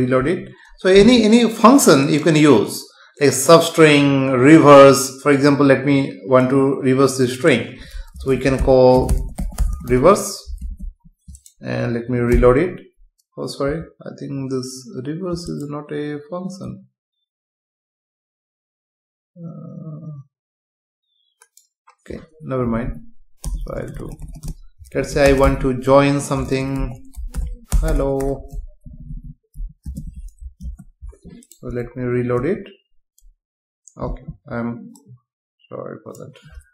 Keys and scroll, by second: 0.2 F5, 10.6 ctrl+s, 12.3 F5, 22.6 Left, 23.4 BackSpace, 28.9 Left, 29.9 space, 30.6 ctrl+s, 32.4 F5.